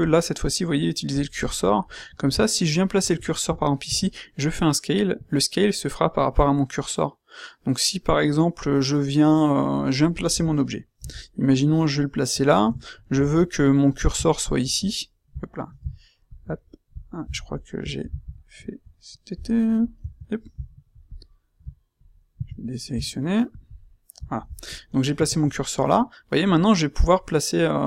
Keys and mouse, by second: 0.0-0.7 drag, 3.8 s, 10.9 g, 22.3 a, 25.1 s.